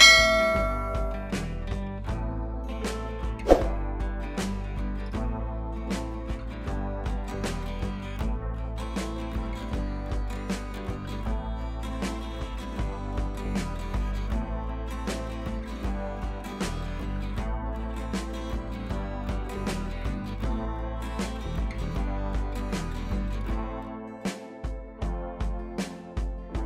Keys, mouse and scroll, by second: 3.4 ctrl+l, 4.1-6.3 drag, 7.3 click, 12.3-14.8 drag, 17.7 click, 18.6 right click, 19.3 click, 24.1 click.